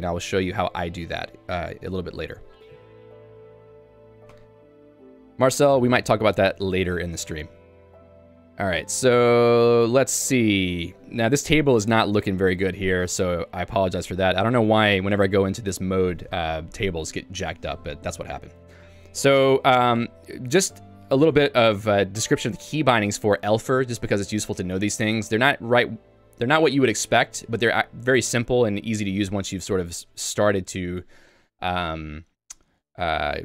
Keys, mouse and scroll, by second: 4.4 click, 4.6 click, 4.8 Escape, 5.9 Escape, 6.2 k, 6.9 j, 10.5 k, 20.1 ctrl+u, 21.3 ctrl+d, 22.2 j, 23.0 k.